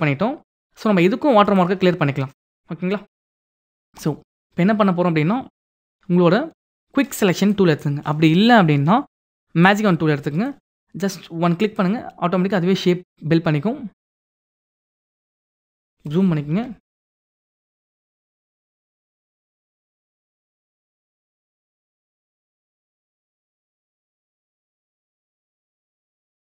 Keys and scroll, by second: 15.9 ctrl+=.